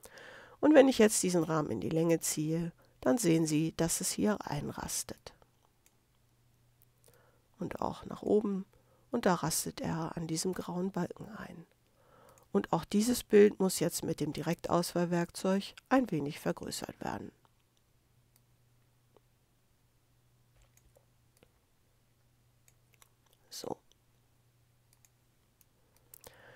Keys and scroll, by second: 25.6 space.